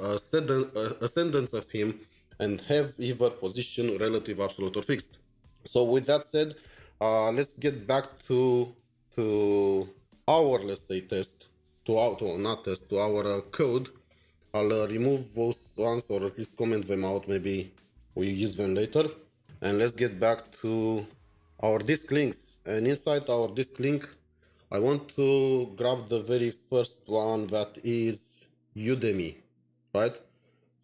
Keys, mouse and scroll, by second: 18.0 typing, 19.1 ctrl+s, 19.4-21.7 scroll down 13, 23.6-25.6 scroll down 1.